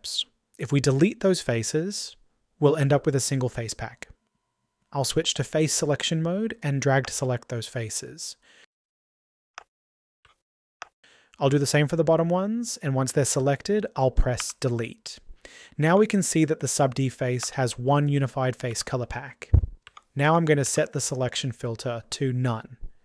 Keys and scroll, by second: 14.0 Delete.